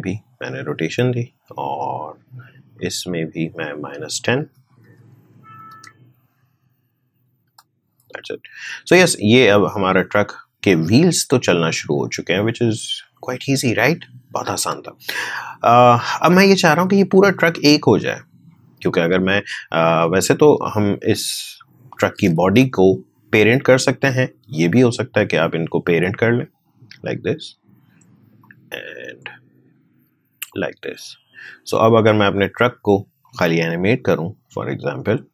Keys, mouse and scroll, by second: 7.4 space, 14.6 space, 16.3 click, 20.4-22.3 drag, 22.3 ctrl+z, 24.8-28.1 drag, 28.3-35.3 drag.